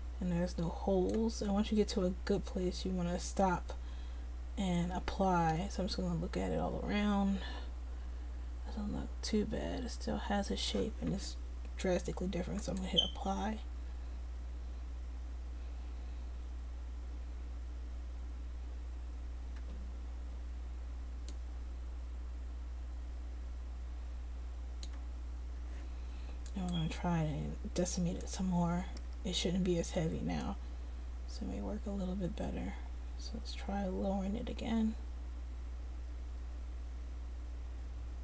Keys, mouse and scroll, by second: 5.7 click, 7.6 middle click, 12.7-25.1 drag, 25.2-29.4 drag, 30.5-34.7 drag.